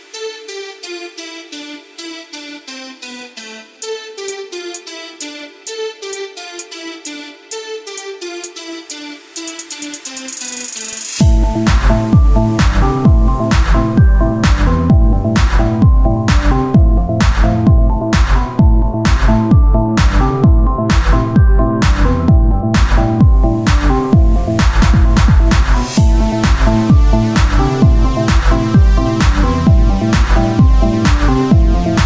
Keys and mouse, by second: 1.0 z, 1.3 click, 1.3-3.1 middle drag, 1.3 right click, 3.1 Tab, 3.1-4.3 drag, 5.8 Tab, 7.1-8.9 drag, 7.2-8.2 right drag, 8.2 Tab, 11.1 Tab, 11.7 Tab, 12.1 Tab, 12.5-13.8 drag, 13.8 Tab, 16.1-18.0 right drag, 16.3 Tab, 18.4-21.9 drag, 21.9-23.3 right drag, 23.3 o, 23.7-26.0 drag, 26.0 Tab, 31.0 Tab.